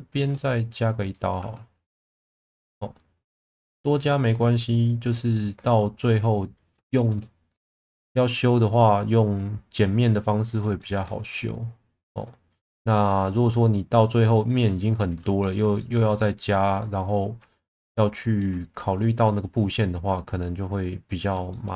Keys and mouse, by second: 0.5 right click, 1.4 1, 5.6 click, 6.9 shift+middle drag, 7.5 click, 8.3 click, 9.0 click, 10.7 shift+middle click, 11.5 click, 14.1 click, 15.4 shift+middle click, 15.8 middle click, 16.8-18.4 middle drag, 19.9 click, 21.5 shift+middle drag.